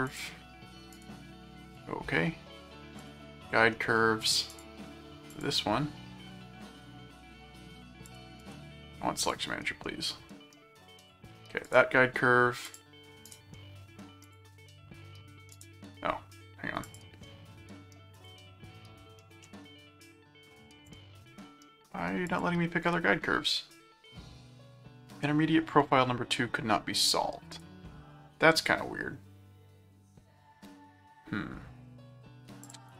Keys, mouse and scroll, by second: 0.1 click, 0.9 right click, 1.7 click, 3.0 click, 3.7 middle click, 4.5 click, 5.3 click, 8.0 click, 8.4 right click, 9.2 click, 11.0 click, 11.6 right click, 12.6 click, 14.2 click, 15.5 right click, 16.8 click, 18.1 click, 19.4 middle click, 20.8 click, 22.2 click, 22.8 right click, 25.8 middle click, 27.5 right click, 32.6 click.